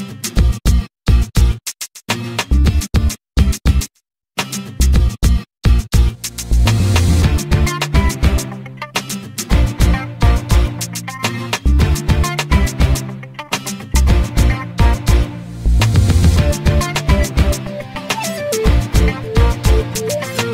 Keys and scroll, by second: 4.1 e, 5.2 space, 7.3 m, 10.2 2, 10.9 Return, 12.5 space, 14.3 m, 16.7 2, 17.3 Return, 19.0 ctrl+z.